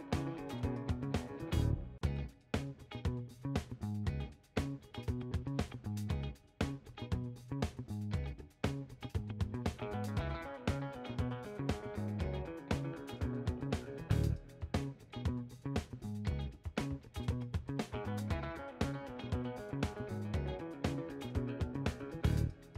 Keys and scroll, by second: 3.0 ctrl+h, 6.4 shift+h, 15.1 1, 15.3 Return.